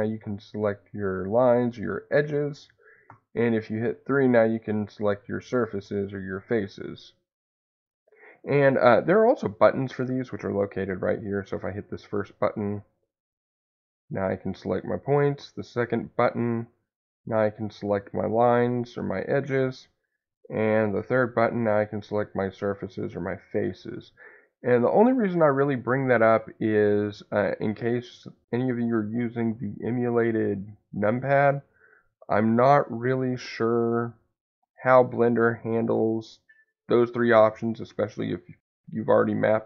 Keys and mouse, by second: 1.5 click, 6.4 click, 7.4 click, 11.4 click, 13.5 click, 16.1 click, 17.2 click, 18.8 click, 20.5 click, 21.3 click, 23.5 click.